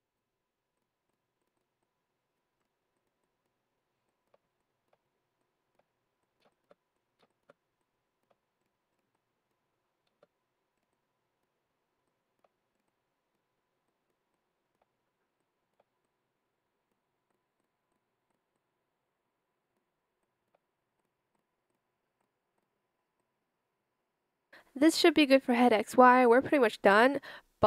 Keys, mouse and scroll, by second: 4.0 shift+click, 4.5 shift+click, 5.3 shift+click, 6.1 shift+click, 6.9 shift+click, 10.1 space, 12.0 shift+click, 13.8 shift+click, 14.2 shift+click, 15.3 click, 20.1 shift+click.